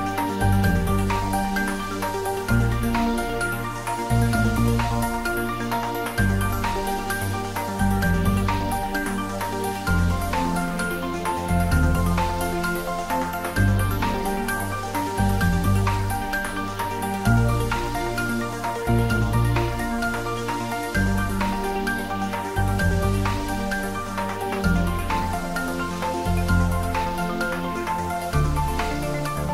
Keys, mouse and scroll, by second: 0.5-1.8 middle drag, 1.8 click, 3.3 ctrl+middle click, 4.1-5.3 ctrl+middle drag, 5.3 ctrl+z, 5.7-6.6 typing, 7.0 click, 8.1-10.7 typing, 12.0 click, 14.5-17.2 typing, 15.2 click, 17.4 click, 17.6 ctrl+z, 18.1 click, 18.9 middle click, 19.5 ctrl+z, 19.9-20.8 typing, 21.1 ctrl+middle click, 22.0 click, 22.9 shift+z, 23.4 r, 27.9 click, 28.1 ctrl+s, 28.8 shift+click, 29.2-29.5 typing.